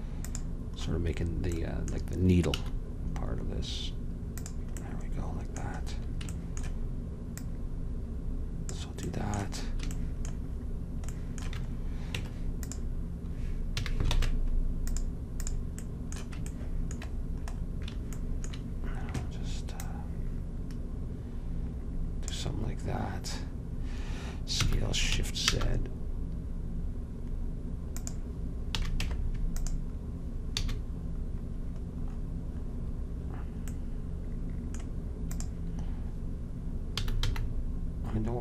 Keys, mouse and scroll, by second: 2.6 s, 7.5-10.1 drag, 12.3 Tab, 13.9 a, 14.2 ctrl+Tab, 15.5-17.5 drag, 19.9-21.8 drag, 24.7 s, 28.9 a, 29.1 Tab, 30.7 a, 35.4-37.3 drag, 37.0 s.